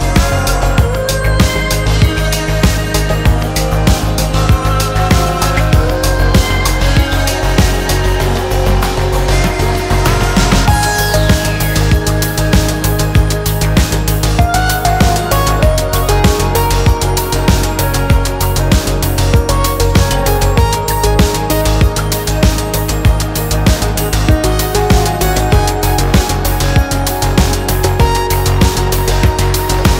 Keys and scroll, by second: 5.0 ctrl+d, 19.7-22.0 typing, 23.7 [, 24.1 [.